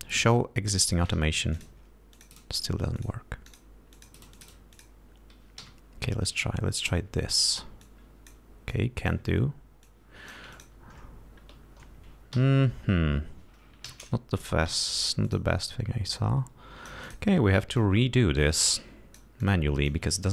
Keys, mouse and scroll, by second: 1.0 click, 1.8 click, 2.4 click, 3.3 click, 3.8 click, 4.3 click, 4.6 click, 5.0 click, 5.9 r, 6.6 click, 8.1 click, 9.0 click, 10.2 click, 10.8 ctrl+click, 12.6 f, 14.2 shift+y, 15.0 d, 15.6 click, 16.4-17.6 drag, 18.1-19.7 drag, 19.7 click, 20.2-20.3 drag.